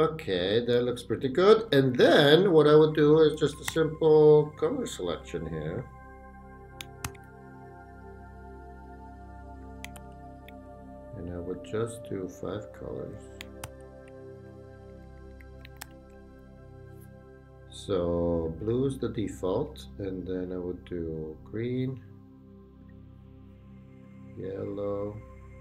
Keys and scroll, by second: 0.5 Up, 1.1 Down, 1.7 Up, 3.7 super+d, 7.3 super+d, 10.0 super+d, 13.6 super+d, 14.5 shift+super+d, 14.7 shift+super+Right, 15.7 shift+super+Right, 15.8 shift+super+d.